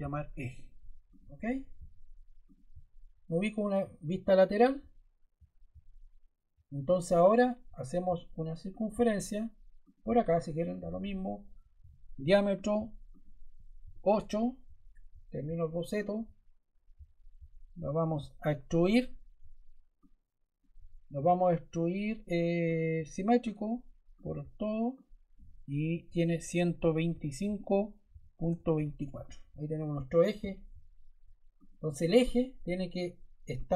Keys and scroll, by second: 0.0-0.5 typing, 11.7 d, 13.7 8, 14.0 Return, 17.9 e, 26.4-28.8 typing, 28.9 Return.